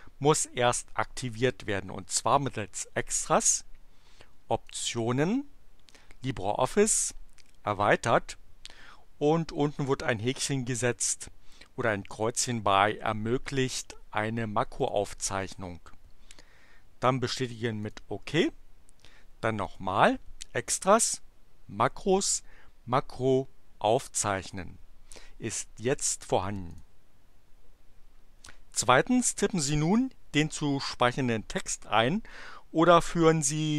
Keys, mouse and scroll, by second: 4.7 click, 14.8 click, 17.8 click, 19.6 click, 26.7 click.